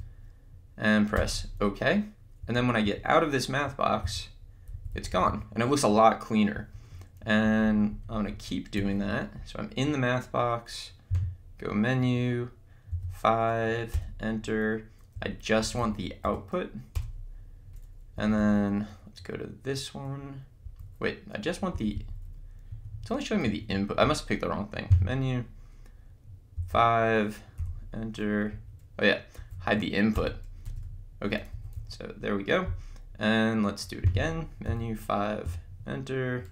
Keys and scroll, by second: 2.4 Left, 6.6 Down, 7.2 Right, 11.3 Menu, 13.1 5, 13.9 Return, 18.2 Down, 20.6 Up, 21.7 Left, 22.7 Right, 25.0 Menu, 26.8 5, 27.6 1, 31.5 Down, 34.2 Menu, 34.8 5, 35.4 1.